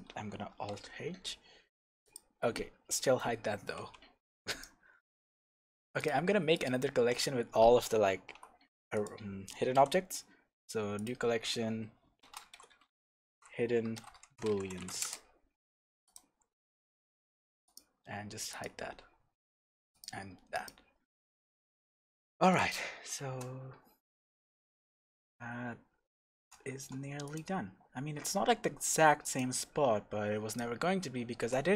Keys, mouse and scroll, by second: 0.5 alt+h, 1.0-2.0 scroll up 2, 2.0 click, 3.7 h, 4.4 click, 5.9 click, 6.5 click, 8.1 alt+h, 8.9 click, 9.7 m, 12.7 d, 14.2 o, 17.6 click, 18.5 click, 19.9 click, 20.5 click, 21.2-21.5 scroll down 1, 21.5 scroll up 1, 21.9 scroll down 1, 22.5 click, 22.8-23.2 scroll up 1, 23.2 shift+z, 27.2 click, 28.0 g, 29.3 click, 29.6 scroll down 1, 30.4 click, 30.8-31.7 scroll up 1.